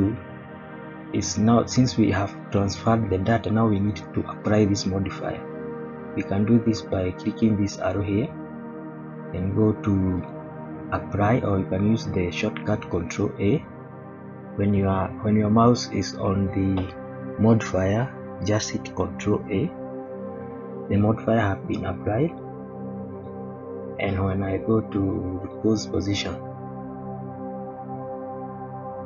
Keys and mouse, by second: 7.8 click, 10.1-13.3 drag, 19.3 ctrl+a, 21.7-22.4 middle drag, 23.1 click, 25.4 click, 26.7 click, 27.9-28.9 middle drag.